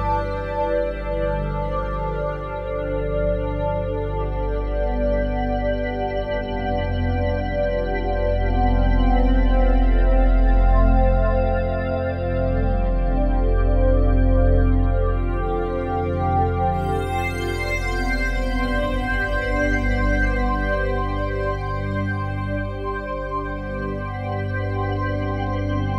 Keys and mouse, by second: 3.4 Tab, 5.6 click, 6.1 Tab, 6.1-7.7 drag, 7.7-8.7 typing, 8.3-13.8 ctrl+alt+drag, 15.7-17.9 alt+drag, 19.2-25.3 drag, 21.1 typing.